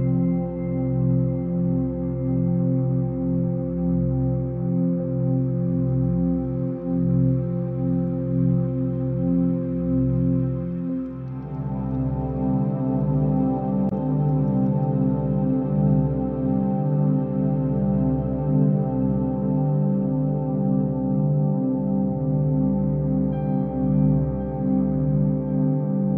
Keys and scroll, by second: 5.8 ctrl+u, 12.4 ctrl+b.